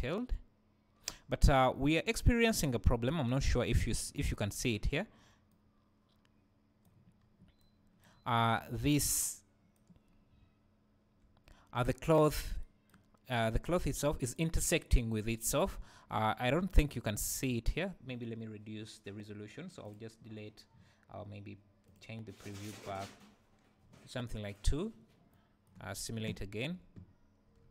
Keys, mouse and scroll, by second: 4.6 Escape, 5.5-19.8 right drag, 7.2-7.6 scroll up 2, 8.3 `, 8.9-9.3 scroll up 2, 10.1-10.4 scroll up 2, 10.4 `, 12.1 scroll down 1, 13.6 `, 15.7 `, 17.2 scroll up 1, 17.5 `, 19.8-25.3 drag, 25.3-27.7 right drag, 25.9-26.5 scroll down 1, 26.5 space.